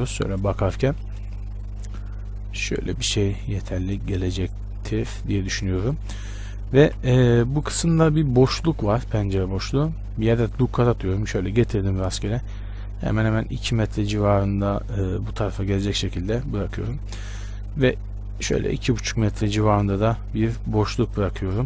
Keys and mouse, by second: 0.2 KP_1, 2.0-6.5 drag, 6.5 z, 7.0 z, 9.9 ctrl+r, 16.0-20.4 right drag, 17.2 ctrl+r.